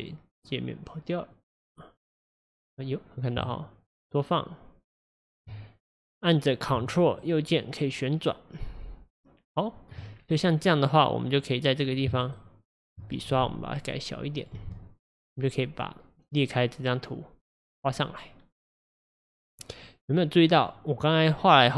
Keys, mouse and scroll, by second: 1.3-3.4 drag, 3.4-6.4 shift+right drag, 7.2-10.1 ctrl+right drag, 10.1-10.6 scroll up 3, 10.6-11.3 scroll down 4, 11.3-12.3 scroll up 1, 12.3-13.4 ctrl+right drag, 13.4-14.5 f, 15.3-18.3 drag, 20.5-21.7 drag.